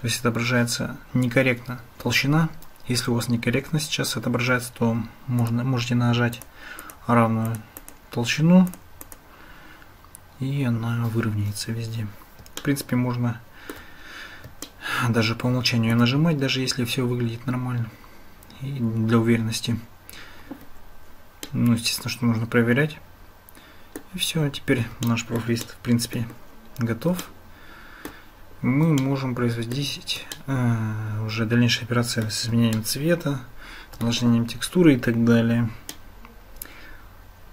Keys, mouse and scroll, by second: 5.4 click, 6.4 click, 6.8 click, 7.5 click, 7.7 click, 8.7 click, 9.0 click, 12.7-13.9 shift+middle drag, 14.7-16.1 shift+middle drag, 21.5-24.1 middle drag, 25.1 shift+middle click, 25.6 middle click, 27.3-28.1 shift+middle drag, 29.0 shift+middle click, 30.3-32.3 middle drag, 32.8-34.1 shift+middle drag, 35.9-37.5 middle drag.